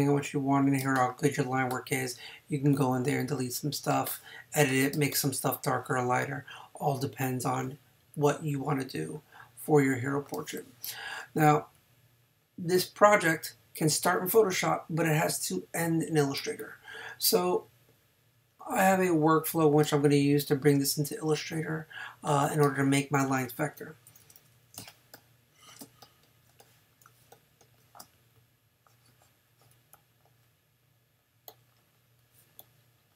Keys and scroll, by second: 0.8 space, 3.9 space, 10.3 space, 16.4 space, 19.8 space, 22.6 space, 25.8 space.